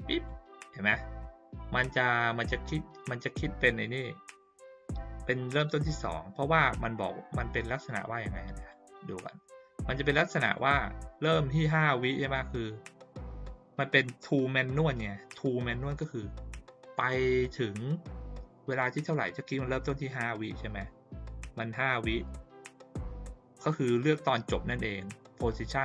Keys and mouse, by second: 8.6 click, 10.4 click.